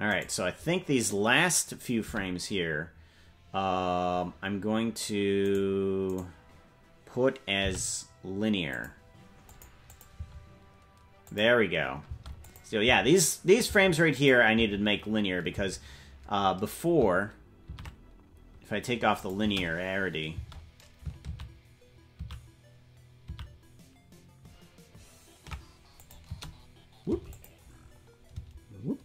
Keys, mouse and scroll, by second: 0.2 right click, 2.0 i, 5.4 right click, 6.8 right click, 7.6 t, 9.5 click, 9.9 click, 10.1 space, 11.3 click, 12.1 space, 12.4 click, 12.8 space, 14.1 space, 14.2 click, 14.5 space, 15.5 space, 18.2 ctrl+z, 19.2 click, 19.4 space, 20.9 space, 21.8 ctrl+z, 22.9 ctrl+z, 24.2 ctrl+z, 26.0 click, 26.2 space, 27.3 click, 27.3 space, 27.9 scroll up 2, 28.3 space.